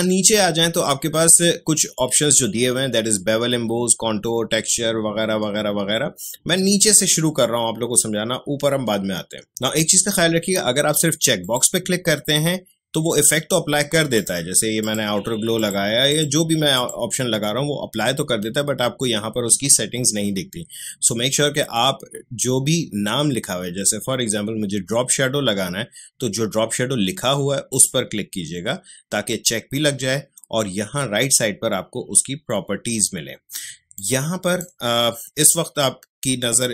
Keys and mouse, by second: 11.4 click, 14.1 click, 27.7 click, 33.9-36.7 drag.